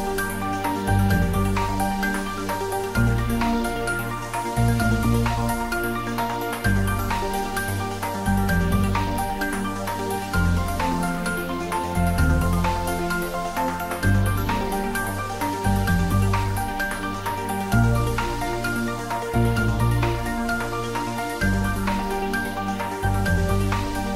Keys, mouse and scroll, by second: 0.7 click, 1.0 shift+middle click, 1.5 Tab, 3.1 Tab, 3.6 shift+a, 4.9 click, 5.4-10.5 typing, 6.0 click, 7.1 click, 7.7 click, 8.2 click, 9.0 click, 10.4 click, 11.0 click, 11.2 shift+middle click, 11.7 ctrl+middle click, 12.7 click, 13.0 ctrl+middle click, 13.6 ctrl+middle click, 14.0 shift+middle click, 15.1 r, 15.5 click, 15.8 s, 16.3 click, 16.5 s, 16.9 z, 17.3 click, 18.0 g, 19.1 click, 19.3 ctrl+middle click, 20.2 r, 21.6-22.8 typing, 22.8 click, 23.1 ctrl+s, 23.3 ctrl+middle click, 23.8-24.1 typing.